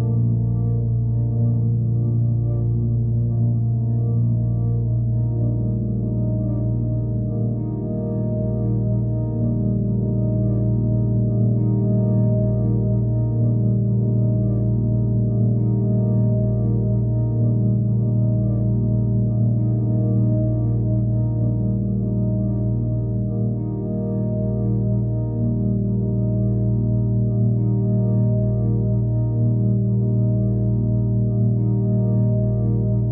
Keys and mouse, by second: 0.2 click, 1.0 middle drag, 2.6-3.6 alt+middle drag, 4.8-11.6 drag, 11.8-12.3 alt+middle drag, 14.3 click, 14.6 click, 15.4-15.9 drag, 16.5-16.9 alt+middle drag, 18.0 click, 20.4 click, 21.8 click, 22.3 click, 23.8 click, 24.5-29.0 drag, 25.4 KP_0, 28.0 BackSpace, 30.3 click, 31.0 click, 31.7 ctrl+s, 32.7 click.